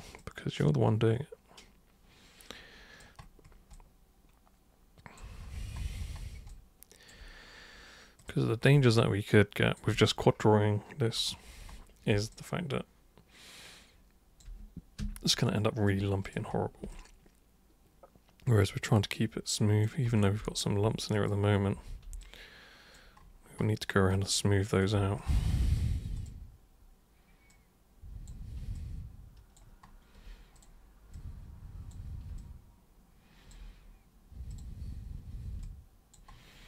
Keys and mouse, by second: 0.2-3.0 alt+super+drag, 3.8-5.2 alt+super+drag, 6.5 alt+super+click, 8.2 super+click, 8.9 alt+super+click, 12.3-14.4 alt+super+drag, 15.0 super+3, 15.3 super+right click, 16.2 super+click, 16.9-19.8 alt+super+drag, 21.2 super+click, 21.8 super+1, 22.2 alt+super+click, 24.1 alt+super+click, 25.2 super+right click, 26.2 super+click, 27.5 super+click, 28.8-29.6 alt+super+drag, 30.6 super+click, 31.1 super+click, 32.4-33.5 alt+super+drag, 34.5 super+click, 35.6-36.1 alt+super+drag.